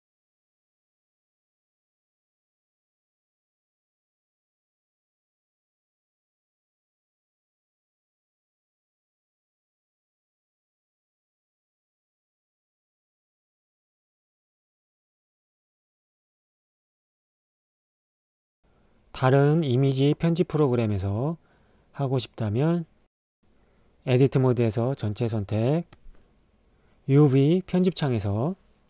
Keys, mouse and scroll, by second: 0.5-3.2 drag, 4.0 click, 8.7 n, 9.5-13.7 drag, 13.8 shift+a, 16.7-17.8 drag, 19.3 ctrl+middle click, 21.3 a, 23.2 Tab.